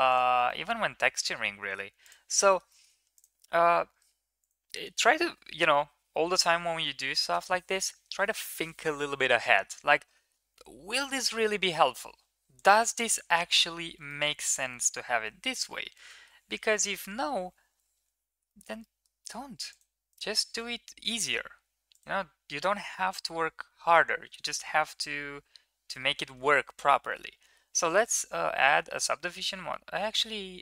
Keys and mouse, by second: 0.3 middle click, 1.8 middle click, 2.3 shift+middle drag, 2.5 middle click, 11.8 KP_1, 13.2 shift+middle drag, 13.9 shift+middle drag, 15.8 shift+middle drag, 18.3 shift+middle click, 18.6 middle drag, 25.9 ctrl+2, 26.8 shift+middle click, 27.8 click, 28.6 Tab, 29.2 middle drag.